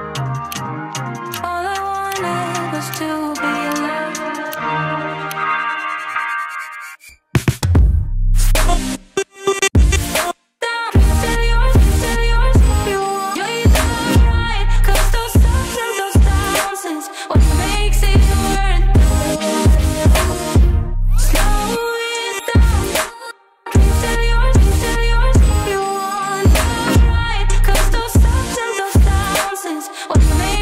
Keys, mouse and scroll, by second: 0.3 space.